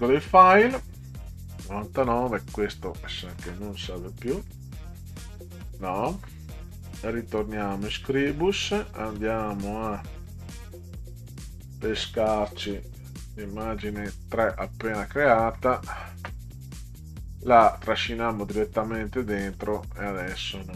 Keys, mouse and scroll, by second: 0.3 click, 2.8 click, 5.6 click, 7.2 click, 8.2 click, 9.8 click, 10.8 click, 11.7 click, 13.3-15.5 drag, 19.5 click.